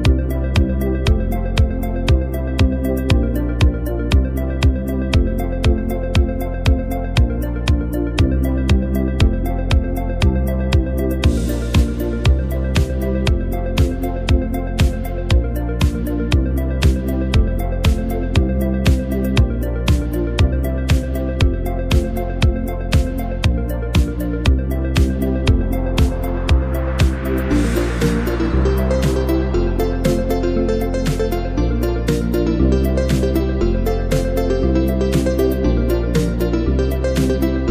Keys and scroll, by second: 0.7 i, 1.8-3.1 typing, 23.2 space, 23.7 space.